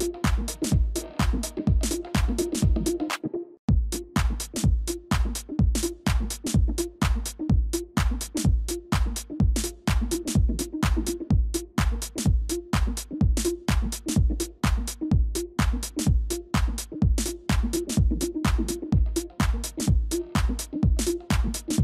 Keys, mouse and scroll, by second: 1.5 ctrl+y, 4.1 shift+click, 6.1 shift+click, 6.8 space, 9.6 ctrl+-, 9.8 ctrl+-, 10.2 ctrl+space, 17.3 typing, 18.6 typing.